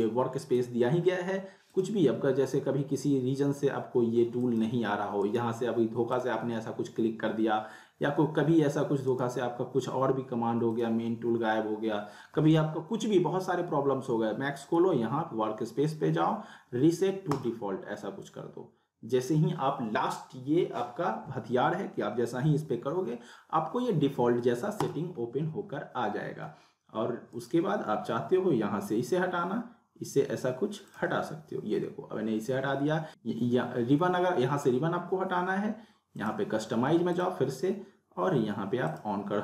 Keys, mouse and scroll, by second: 4.4 click, 5.2 right click, 6.1 click, 9.1 right click, 10.7 click, 14.5 click, 17.3 click, 24.8 click, 25.0 click, 25.2 scroll down 1, 25.6 scroll up 1, 27.3 right click, 30.9 click, 33.1 click, 36.2 click.